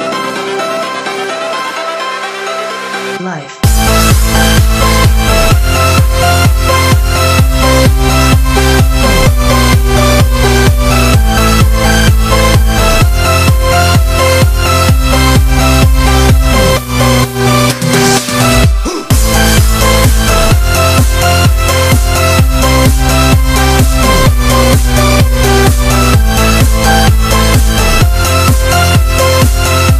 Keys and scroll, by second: 1.5 super+-, 2.2 super+-, 3.0 super+=.